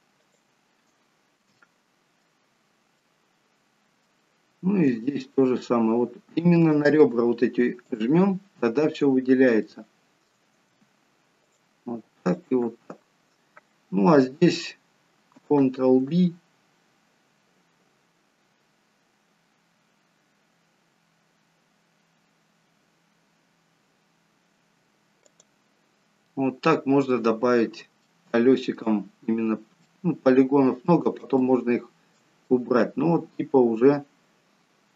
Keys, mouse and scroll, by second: 0.2 alt+shift+click, 1.0-1.5 scroll down 1, 1.6 alt+shift+middle click, 3.0 shift+middle click, 4.3-5.5 shift+scroll up 4, 6.5 alt+shift+click, 9.7 middle click, 11.4 alt+shift+click, 12.9-15.2 scroll down 1, 16.2 ctrl+b, 25.8-26.2 scroll down 5, 26.2 middle click, 28.0 shift+middle click, 28.9-29.7 scroll up 2, 29.7 scroll up 3, 29.9 shift+middle click, 32.1 shift+middle click, 32.4 middle click.